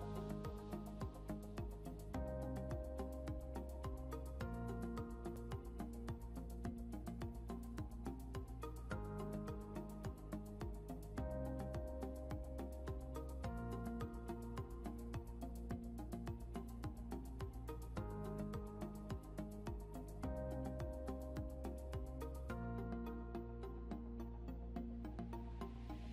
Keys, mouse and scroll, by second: 1.3 scroll, 1.4 scroll up 1, 8.3 right click, 10.3 scroll up 1, 14.9 scroll down 1, 17.9 right click, 22.0 scroll up 1, 23.5 scroll down 1.